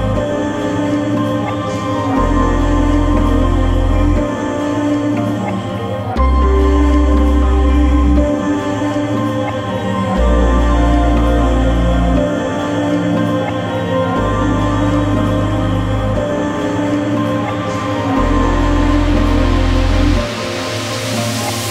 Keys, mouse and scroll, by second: 1.1 middle click, 1.9 click, 8.1 click, 14.6-15.5 scroll, 15.5 middle click, 16.1 scroll up 1, 16.9-17.7 scroll down 1, 19.2 middle click.